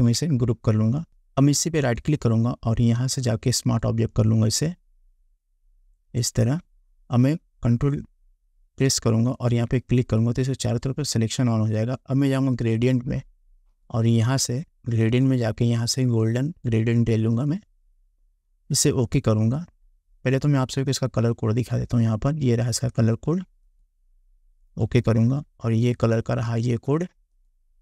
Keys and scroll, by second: 0.1 ctrl+g.